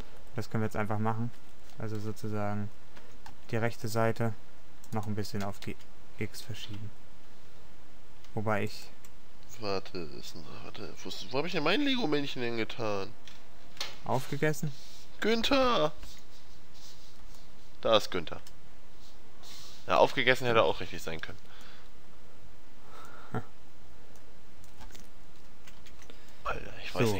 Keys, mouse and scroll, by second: 3.0 a, 3.4 c, 5.6 g, 10.2 middle click, 13.9 a, 16.2 Tab, 19.3-22.1 middle drag, 23.0-24.6 middle drag, 25.9 ctrl+KP_1.